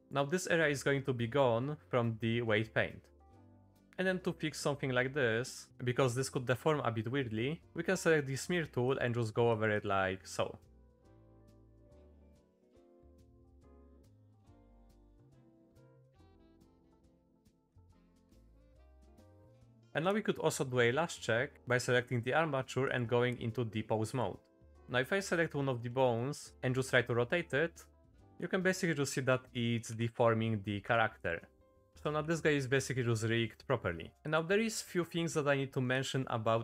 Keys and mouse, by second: 0.0 click, 3.5 middle click, 4.0 middle click, 7.6 ctrl+z, 8.2 click, 8.5 click, 8.8 click, 9.0 click, 9.2 click, 9.5 click, 9.9 ctrl+z, 10.1 ctrl+z, 10.3 ctrl+z, 10.9 ctrl+z, 11.5 click, 12.9 middle click, 13.4 click, 13.6 click, 13.9 click, 14.0 click, 14.3 middle click, 15.2 click, 15.5 click, 15.8 click, 16.4 middle click, 17.1 middle click, 17.7 middle click, 18.6 middle click, 19.3 shift+middle click, 19.8 middle click, 22.9-24.2 drag, 25.9 shift+middle click, 26.3 middle click, 26.5 r, 28.4 r, 31.5 g, 31.9 r, 34.1 click, 34.7 middle click, 35.5-35.8 middle drag, 35.9 click.